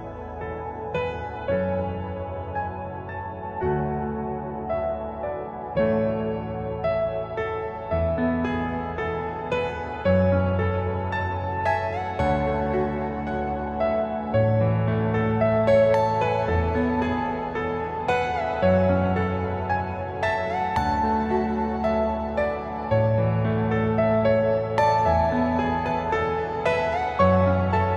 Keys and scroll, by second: 3.2 Escape, 5.1 ctrl+z, 6.1 Delete, 8.4 Down, 10.1 Up, 24.4 Escape, 26.1 Delete.